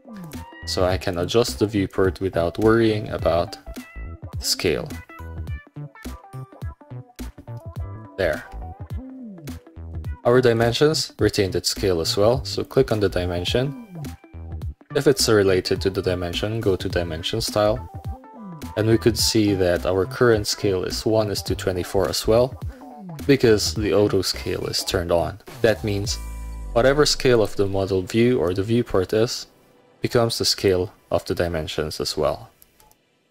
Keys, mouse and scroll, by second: 0.3 click, 0.9 middle click, 1.2 click, 1.8 middle click, 3.0 middle click, 4.8 alt+click, 8.4 Escape, 9.1 Escape, 9.3-10.4 middle drag, 10.7 middle click, 12.7 click, 15.2 click, 26.9 middle click, 27.4 click, 27.8 middle click, 28.2 middle click, 29.0 middle click, 29.8 middle click, 30.2 middle click, 30.7 click, 31.3-32.2 scroll down 1, 32.2 scroll up 1, 32.4 middle click.